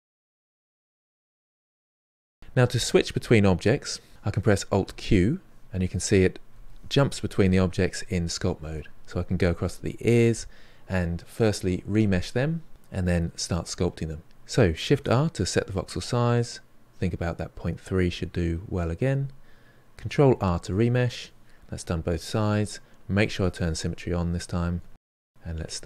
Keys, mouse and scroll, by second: 0.0 shift+click, 0.4 middle click, 0.8 shift+click, 1.1 middle click, 1.2 click, 1.7-4.1 ctrl+middle drag, 4.9 alt+q, 5.7 alt+q, 6.5 alt+q, 7.2 alt+q, 7.9 alt+q, 14.9 shift+r, 20.2 ctrl+r, 21.0-23.2 middle drag, 23.2 click, 23.8 middle click, 24.5 click, 24.7 middle click, 25.1 click, 25.4 middle click, 25.6 shift+click, 25.8 middle click.